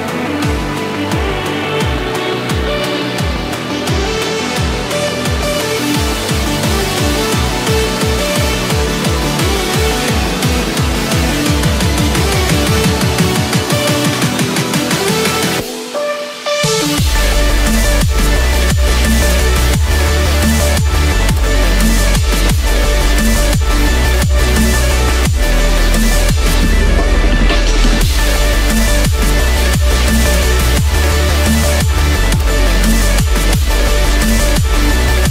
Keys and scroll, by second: 2.9 ctrl+=, 12.0 ctrl+z, 18.4 ctrl+-, 23.1 ctrl+z, 34.7 ctrl+z.